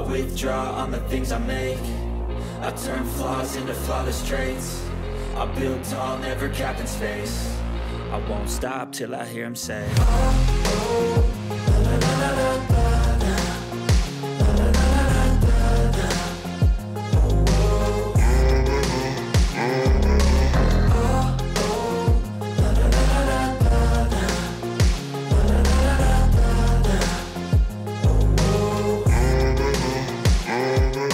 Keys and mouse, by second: 3.1 click, 3.9 click, 4.3 click, 6.6 click, 7.0 click, 10.5 click, 11.5 click, 12.2-14.0 drag, 14.1 click, 15.7 click, 16.0 click, 28.7 click, 30.8 ctrl+z.